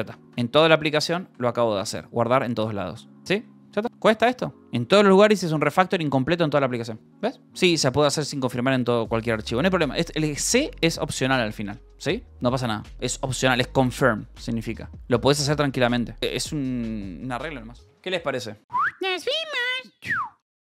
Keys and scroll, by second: 0.0-2.0 typing, 3.8 space, 3.9 d, 4.5 j, 6.8-7.6 typing.